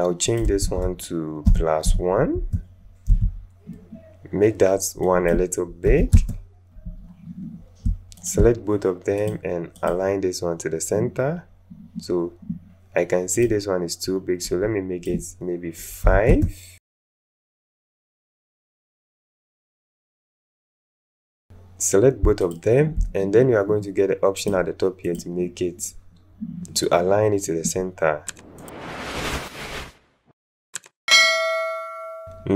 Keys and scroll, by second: 0.6 a, 1.4 KP_Add, 1.8 KP_1, 2.3 Return, 5.9 KP_6, 6.3 Return, 16.0 KP_5, 16.2 Return, 29.6 ctrl+z.